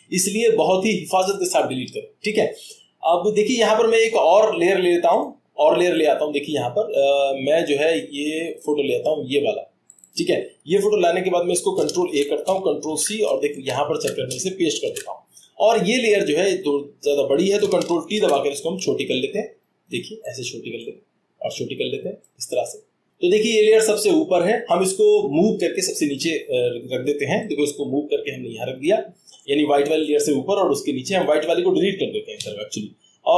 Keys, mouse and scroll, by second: 5.2 click, 6.0 click, 8.2-9.4 middle drag, 8.2-9.3 scroll down 1, 9.3 scroll down 1, 9.9-11.1 drag, 11.8 click, 12.0 ctrl+a, 12.9 ctrl+c, 13.5 ctrl+Tab, 14.9 ctrl+v, 17.4 click, 18.1 ctrl+t, 19.3 click, 20.1 click, 21.1 click, 21.3 click, 22.0 click, 22.9 click, 28.8-29.5 drag.